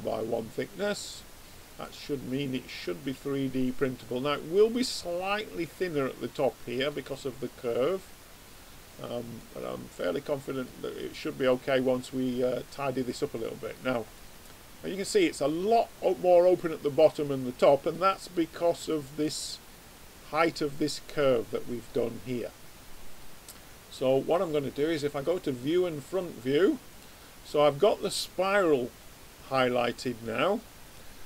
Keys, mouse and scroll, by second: 1.8-3.4 middle drag, 3.4-4.5 middle drag, 5.6-6.9 middle drag, 8.9 click, 9.6 click, 9.9 middle click, 11.0-16.2 middle drag, 19.7 click, 20.4 right click, 20.7-24.9 middle drag, 25.1 click.